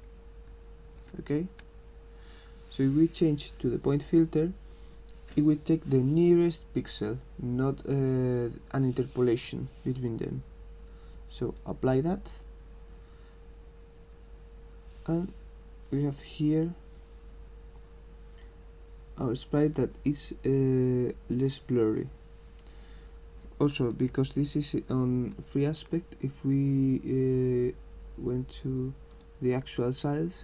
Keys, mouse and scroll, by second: 3.8 click, 11.1 click, 29.2 click.